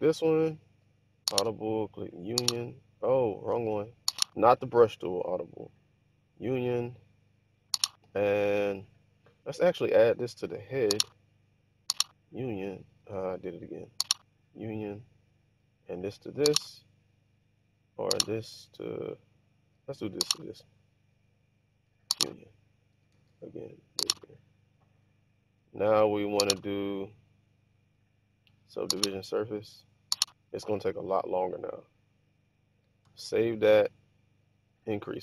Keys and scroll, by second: 3.6 super+z, 13.2 super+z, 23.2 super+z, 33.4 super+s.